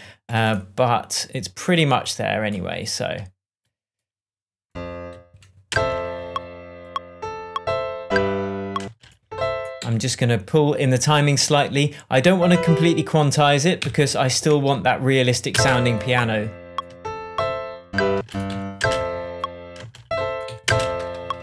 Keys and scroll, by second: 5.1 Right, 5.6 space, 8.8 space, 9.7 Left, 13.7 Right, 15.5 space, 18.1 space, 18.4 Right, 18.7 space, 20.4 Right, 20.6 space.